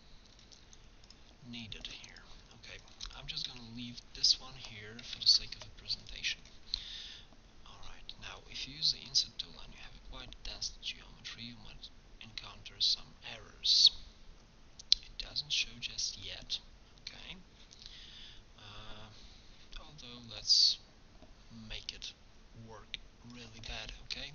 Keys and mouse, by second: 0.7 x, 2.0 x, 3.0 x, 5.2 ctrl+Tab, 11.1 i, 20.4-22.4 drag, 22.4-23.9 middle drag.